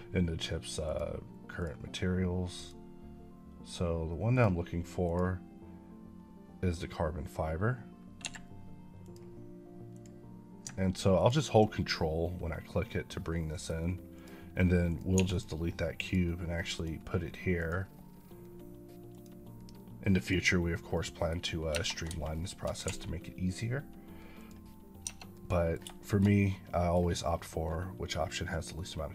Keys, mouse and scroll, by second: 0.1 click, 8.1 Escape, 8.9 click, 10.0 click, 11.1 ctrl+click, 12.5 middle click, 13.4 middle click, 14.0 click, 15.0 click, 15.0 x, 15.2 double click, 15.9 click, 17.9 click, 20.6 click, 20.8 middle click, 21.6 Tab, 22.2 shift+middle click, 22.7 a, 24.2 click, 24.9 Tab, 25.2 middle click, 26.1 shift+middle click, 26.1 middle click, 28.6 middle click.